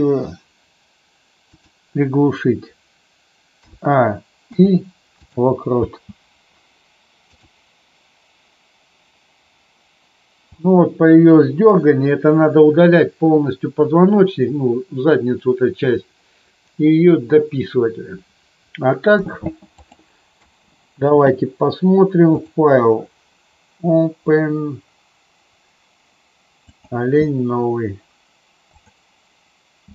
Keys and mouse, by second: 3.6 a, 4.4 i, 5.8 space, 7.2 click, 20.4 space, 22.3-29.6 drag.